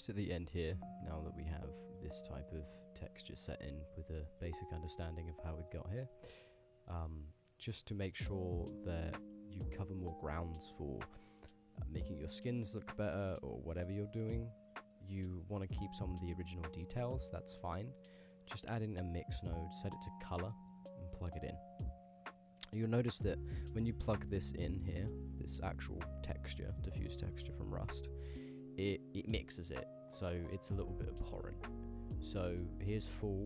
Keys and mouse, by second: 1.4 click, 1.8 middle click, 2.5 click, 3.1 click, 3.7 g, 4.5 g, 6.1 shift+click, 7.4 click, 8.2 middle click, 8.8 middle click, 9.1 shift+a, 14.8 click, 17.7 middle click, 18.9-20.0 drag, 20.6 click, 22.4-23.9 drag, 24.2 middle click, 24.6 click, 25.0-25.9 drag, 26.8-28.0 drag, 28.5 middle click, 29.6 middle click, 30.4-31.8 drag.